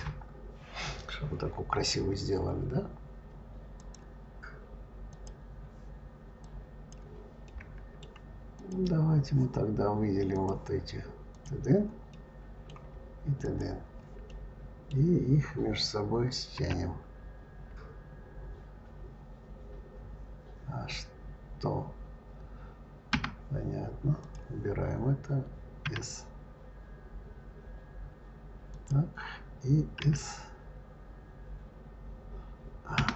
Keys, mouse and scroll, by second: 3.6-6.7 drag, 7.3-8.4 middle drag, 8.4 click, 10.1 click, 11.1 click, 11.9-13.3 middle drag, 13.3 shift+click, 14.1-16.4 middle drag, 16.4 s, 24.0 click, 25.7 s, 29.8 s.